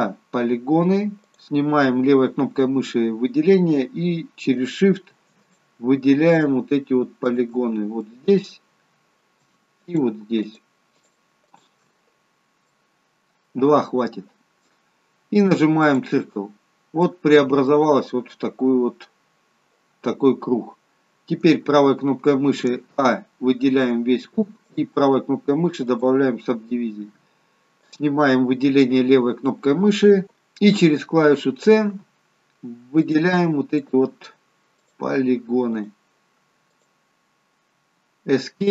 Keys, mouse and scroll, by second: 1.4 click, 4.7 click, 5.6 shift+click, 7.7 shift+click, 8.1 middle click, 10.0 shift+click, 11.1 shift+click, 12.6 shift+click, 12.6-14.8 scroll down 2, 12.9 middle click, 16.0 click, 16.8-18.1 scroll up 3, 17.2 middle click, 21.6 right click, 23.0 a, 26.0 right click.